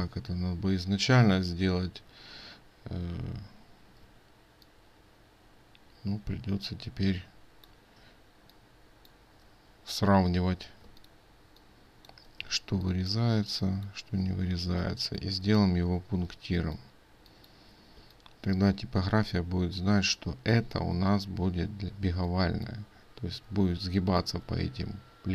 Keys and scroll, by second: 11.0 ctrl+space.